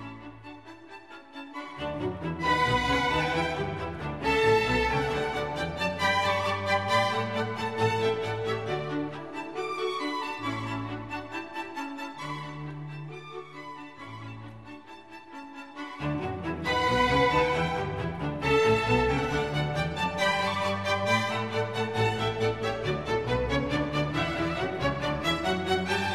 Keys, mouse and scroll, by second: 0.3-1.0 scroll up 3, 2.0-2.3 scroll down 1, 2.7-3.0 scroll down 2, 3.1 scroll up 1, 4.3 right click, 8.3 shift+click, 19.7 ctrl+j, 24.4 ctrl+j.